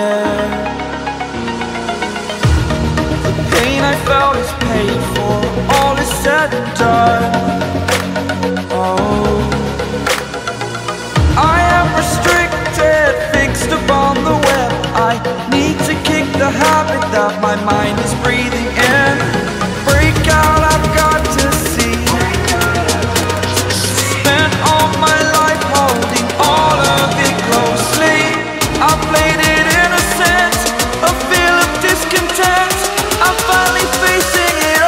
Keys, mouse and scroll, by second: 3.2 scroll up 1, 3.4-5.3 drag, 5.3 scroll down 1, 5.7-6.3 scroll up 1, 6.6-8.6 drag, 10.3 scroll down 1, 10.5-10.9 scroll up 1, 11.6-13.0 drag, 13.0-13.4 scroll down 2, 13.4 scroll up 1, 13.6 scroll down 1, 13.9-14.3 scroll up 1, 15.2-16.5 drag, 17.6 scroll down 1, 17.9-19.1 scroll up 1, 19.1 click, 20.7-21.1 scroll down 1, 21.1-21.5 scroll up 1, 22.0 click, 22.9 scroll up 1, 23.6 click, 24.6-25.1 scroll down 1, 25.1-25.8 scroll up 1, 26.0-27.7 drag, 27.7-28.1 scroll down 1, 28.1-28.5 scroll up 1, 29.0 click, 29.6 scroll up 1, 30.1 click, 30.3 scroll down 1, 30.8 scroll up 1, 32.4 click, 33.8 scroll down 1, 34.2 scroll up 1.